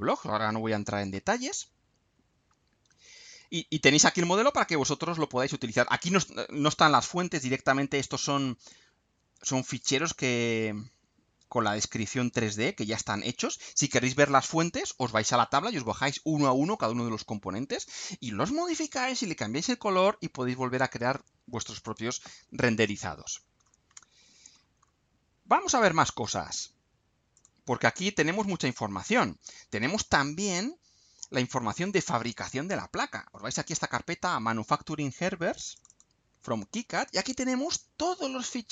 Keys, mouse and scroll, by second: 1.1-4.2 middle drag, 8.2 click, 9.7 click, 13.1 click, 21.8 click, 23.3-23.8 scroll down 1, 25.5 scroll up 2, 27.4 click, 29.7 click, 31.8 click, 35.7 click.